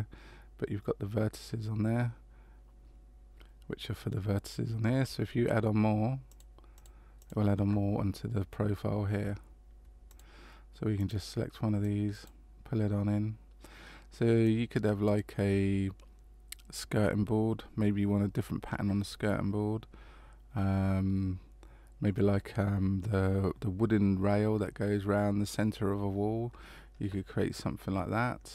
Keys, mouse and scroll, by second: 6.3 click, 6.7 click, 7.2 click, 10.1 click, 11.0 click, 11.8 click, 14.4 click.